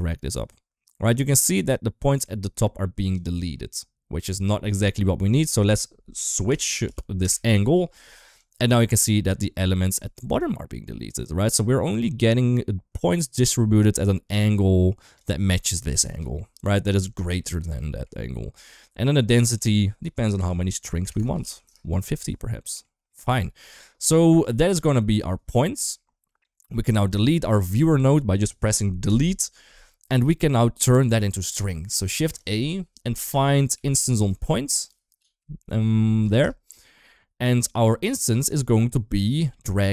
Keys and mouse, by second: 5.2-7.2 drag, 8.3-15.1 drag, 16.0 middle click, 17.7 middle click, 19.2-21.6 drag, 21.0 BackSpace, 22.3-22.6 middle drag, 23.0 middle drag, 24.2 click, 25.4 shift+middle click, 29.0 typing, 30.1 middle click, 31.9 shift+a, 35.4 Down, 35.8 Down, 35.9 Down, 39.1-39.9 drag.